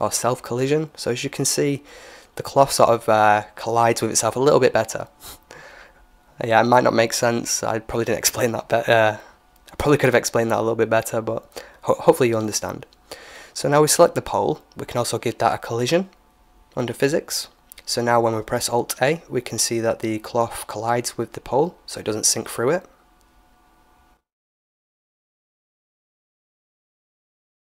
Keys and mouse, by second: 8.7-11.2 drag, 11.4 right click, 13.1-15.5 middle drag, 15.5-17.3 drag, 19.0 alt+a, 27.0-27.6 middle drag.